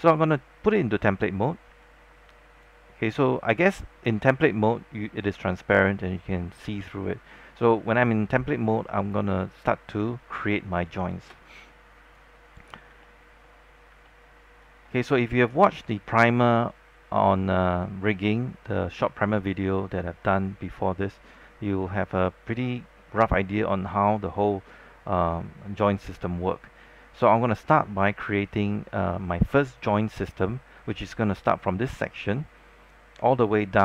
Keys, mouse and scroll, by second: 1.8 alt+click, 1.8 scroll up 1, 11.1 alt+space, 11.2-12.7 drag, 12.7 scroll down 1, 13.1 alt+middle click, 13.8-14.4 scroll up 2, 14.9 scroll down 1, 15.2 scroll up 1.